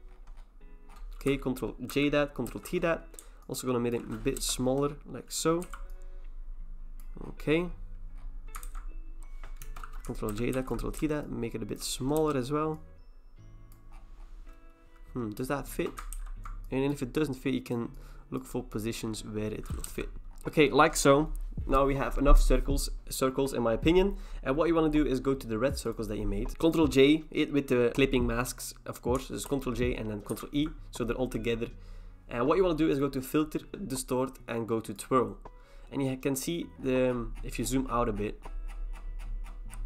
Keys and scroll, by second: 1.9 ctrl+j, 2.5 ctrl+t, 4.4 Return, 5.6 v, 8.6 ctrl+t, 9.6 Return, 10.3 ctrl+j, 10.5 ctrl+t, 12.2 Return, 16.1 ctrl+t, 19.8 Return, 29.5 ctrl+j, 30.3 ctrl+e.